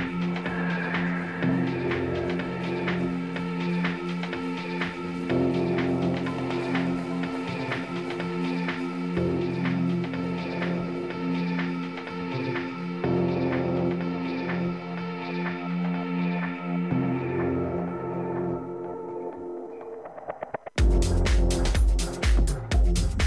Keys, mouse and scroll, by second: 1.3 Tab, 1.9-3.9 right drag, 5.9-7.8 drag, 7.1-12.9 middle drag, 12.9 Tab, 13.5 a, 13.9 a, 14.5-16.7 middle drag, 17.6 Tab, 18.0 Tab, 19.5-20.8 right drag, 20.3 Tab, 20.8-22.3 middle drag.